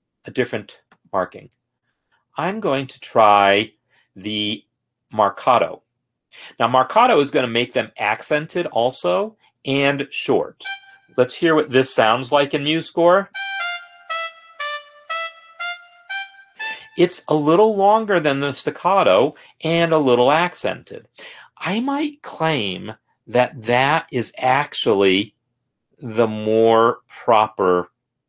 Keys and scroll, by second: 13.3 space, 16.8 space.